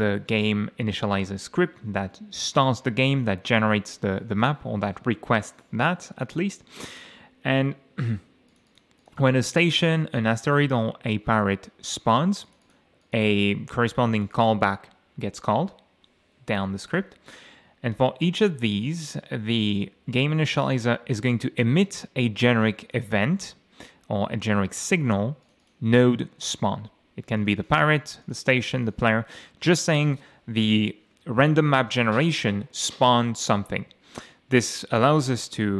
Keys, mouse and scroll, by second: 0.7-1.3 scroll down 4, 8.5 click, 10.3 click, 12.5 click, 13.0 click, 14.1 click, 15.4-15.9 scroll down 2, 16.0-16.4 scroll down 2, 16.9 click, 20.5-23.1 drag, 25.4 click, 27.4 click, 28.2 click, 28.8 click.